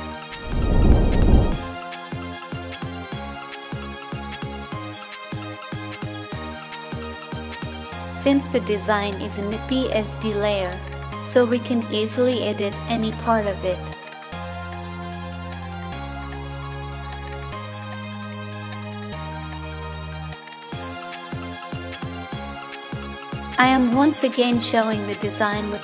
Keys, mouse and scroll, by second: 2.6 ctrl+-, 14.9-16.2 drag, 16.4-17.7 drag.